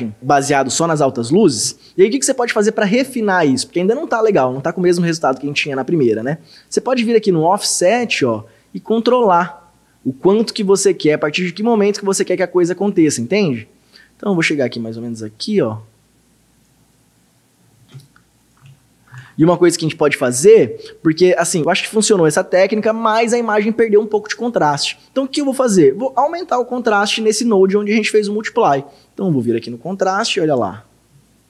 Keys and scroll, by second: 18.7 ctrl+d.